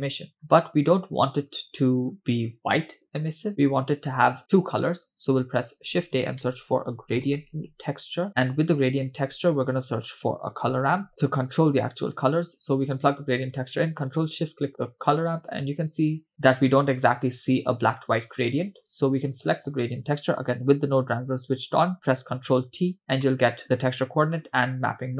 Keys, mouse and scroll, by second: 0.4-0.8 drag, 1.5-2.1 drag, 5.6 shift+a, 9.2 shift+a, 11.7-13.1 drag, 13.6 click, 14.5 ctrl+shift+click, 19.0 click, 19.6 click, 22.4 ctrl+t, 23.1-23.5 scroll down 2, 23.2 middle click, 23.6 click, 23.6-24.5 scroll up 2, 24.6 shift+click, 25.0-25.1 drag.